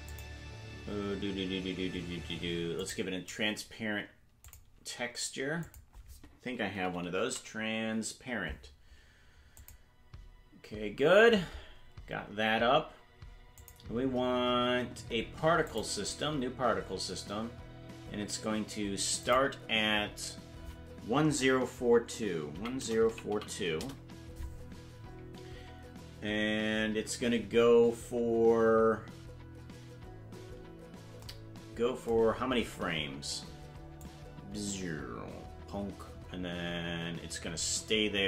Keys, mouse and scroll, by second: 0.1-2.9 drag, 4.4-9.9 drag, 13.6 click, 15.6 click, 19.2-24.7 drag, 32.3-33.2 scroll down 12, 34.0-38.2 drag.